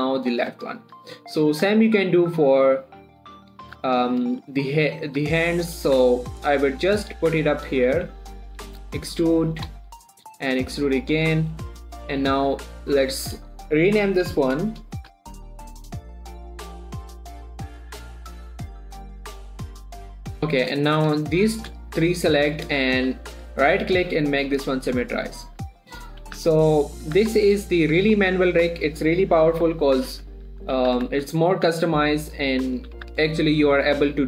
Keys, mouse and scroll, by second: 1.3 shift+middle click, 1.7 scroll up 1, 1.9 shift+middle click, 2.3 scroll up 1, 2.8 click, 3.0-3.6 scroll down 1, 3.6 click, 4.1 shift+d, 4.5 click, 4.7 r, 5.3 click, 5.5 g, 5.9 click, 6.0 r, 7.0 click, 7.1 g, 7.4 click, 8.4 g, 8.9 click, 9.1 e, 10.0 click, 10.3 shift+middle click, 10.5-10.8 scroll up 1, 10.8 e, 11.4 click, 11.7 scroll down 1, 11.9 shift+middle click, 12.5 click, 15.5-18.7 typing, 17.1 Return, 17.2 click, 18.2 shift+Return, 18.3 click, 18.9 click, 19.2 right click, 19.3 click, 19.8-20.2 typing, 20.4 shift+Return, 21.1-22.4 shift+drag, 24.0 right click, 24.9 click, 26.0 scroll down 2, 26.2 middle click, 26.7 z, 27.2 middle click, 27.5 1, 28.2 middle click, 28.7-29.0 scroll up 1, 30.0-32.1 typing, 30.8 shift+middle click, 31.0 shift+scroll up 2, 31.5 shift+middle click, 31.9 click, 32.7 click, 33.5 ctrl+z, 34.1 click.